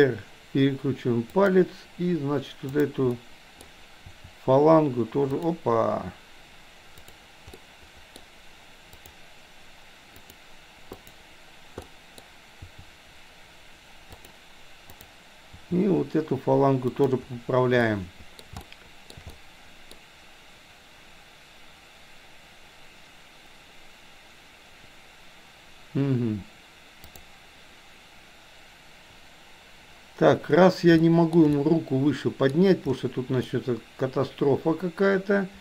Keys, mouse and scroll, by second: 2.8 click, 3.2 middle click, 4.0 r, 7.0 click, 7.5 middle click, 9.0 click, 10.2 click, 11.0 click, 11.9 middle click, 12.7 r, 15.5 r, 17.9-18.4 middle drag, 18.7-19.2 shift+middle drag, 19.3-21.0 middle drag, 27.2 click, 31.0-31.4 shift+middle drag, 31.5-32.7 middle drag, 33.5-35.6 middle drag.